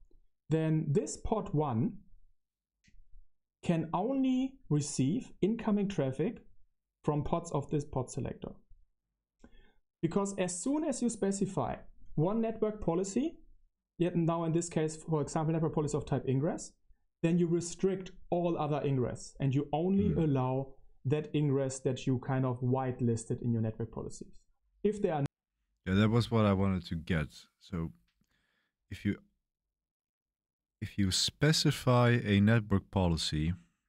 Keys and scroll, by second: 23.5 space.